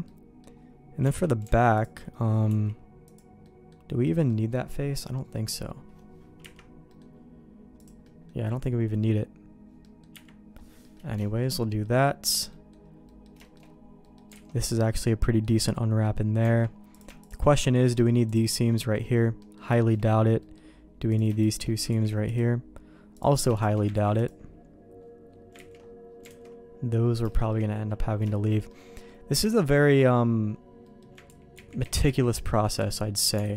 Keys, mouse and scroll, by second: 0.1 middle click, 1.0 Tab, 1.8 alt+click, 2.5 x, 3.4 middle click, 4.3 middle click, 6.5 KP_Divide, 9.8 middle click, 10.1 KP_Divide, 10.8 middle click, 11.2 shift+middle click, 11.6 middle click, 12.1 middle click, 12.5 middle click, 13.0 middle click, 13.4 shift+middle click, 14.0 middle click, 14.4 alt+a, 15.2 middle click, 15.6 middle click, 16.4 Tab, 16.9 click, 17.2 shift+click, 17.8 ctrl+e, 19.4 middle click, 19.8 shift+middle click, 20.4 middle click, 21.1 click, 21.4 shift+click, 21.9 ctrl+e, 23.1 click, 23.9 ctrl+e, 25.6 ctrl+z, 26.3 alt+a, 27.3 shift+middle click, 28.3 shift+middle click, 28.7 middle click, 29.5 shift+middle click, 29.9 middle click, 30.8 middle click, 31.3 ctrl+z, 31.5 ctrl+z, 31.8 ctrl+z, 32.1 ctrl+z, 32.9 middle click, 33.4 alt+a.